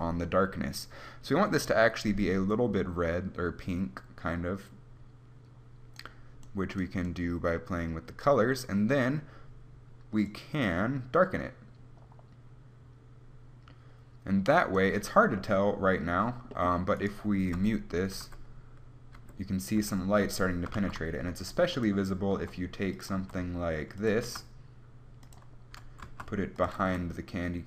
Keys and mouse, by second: 15.5 middle click, 17.1-18.7 right drag, 17.7 m, 18.3 m, 20.8 shift+a, 22.5 g, 23.2 click, 23.3 s, 24.3 g, 24.7 click, 24.9 click, 25.8 g, 26.8 g.